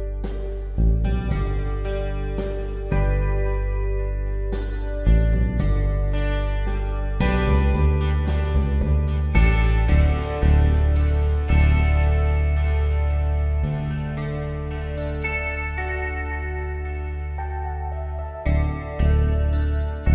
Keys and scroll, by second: 0.0 ctrl+x, 1.5 ctrl+v, 8.5-13.5 typing, 16.7 space.